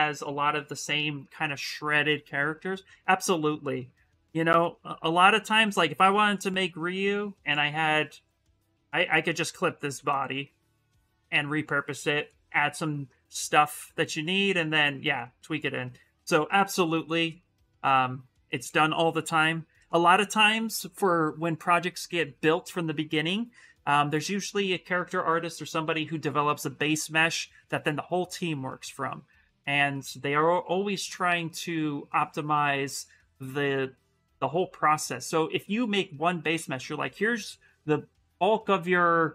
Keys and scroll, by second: 9.3 shift+f, 9.7 shift+f.